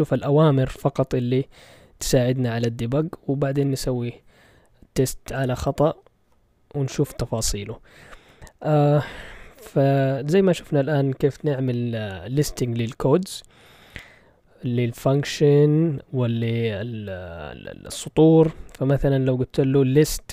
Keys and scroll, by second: 9.1 ctrl+l, 19.9-20.3 typing.